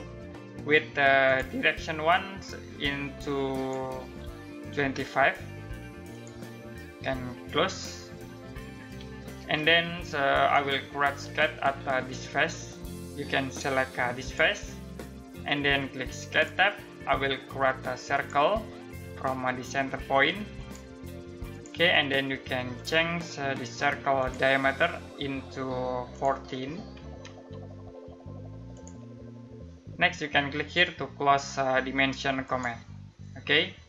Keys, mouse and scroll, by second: 0.8 click, 4.3-5.0 typing, 5.7 click, 9.1 ctrl+middle click, 13.8 click, 26.2-27.3 typing, 28.3 click, 32.0 click.